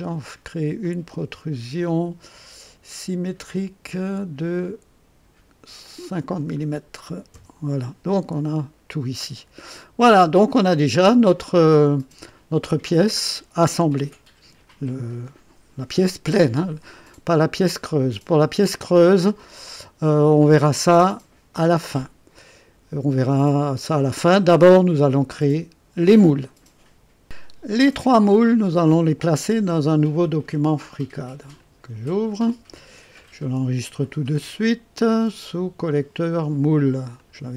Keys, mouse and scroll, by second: 0.8-1.7 drag, 2.9 click, 5.8 click, 7.0 KP_5, 7.3 Return, 8.5 click, 9.7 click, 11.1 click, 12.8-16.2 drag, 17.0 click, 18.3 right click, 24.5-26.6 drag, 31.5 click, 34.2 ctrl+s, 35.8 click, 37.1 click.